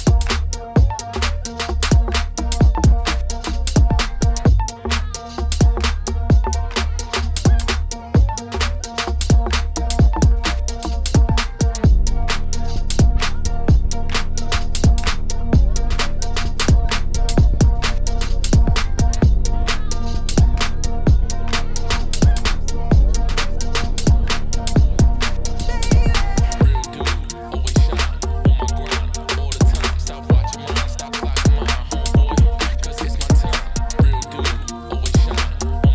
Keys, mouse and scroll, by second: 0.0 click, 0.4 Tab, 0.6 middle click, 0.8 Tab, 1.4 z, 1.8 z, 2.4 middle click, 3.0 2, 3.6 KP_7, 6.0 middle click, 6.4 z, 6.6-7.8 middle drag, 9.1 ctrl+b, 12.3 middle click, 12.9 ctrl+r, 14.1 middle click, 14.6 Tab, 14.8 middle click, 15.1 right click, 15.3 middle click, 16.0 Tab, 16.2 ctrl+r, 17.8 KP_1, 18.2 z, 18.5 shift+middle click, 18.7-19.2 scroll up 5, 19.2 scroll down 1, 19.4 3, 19.9 click, 20.5 g, 22.5 g, 24.3 g, 25.7 click, 25.9 g, 26.8 click, 27.5 click, 27.6 g, 29.5 click, 29.6 g, 30.6 click, 30.6 g, 31.6 click, 31.7 g, 32.4 Tab, 32.6 middle click, 32.7-33.0 scroll down 4, 33.0 z, 33.2 click, 33.4 scroll down 1, 33.6 middle click, 34.1 scroll down 1, 34.2 scroll up 2, 34.4-35.5 shift+middle drag, 35.5 click.